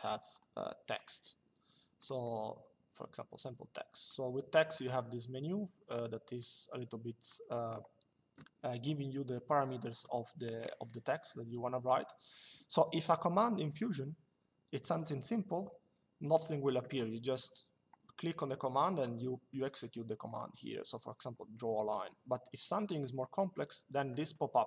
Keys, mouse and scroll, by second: 0.1 click, 1.7 click, 3.7 click, 6.1 click, 23.8 click.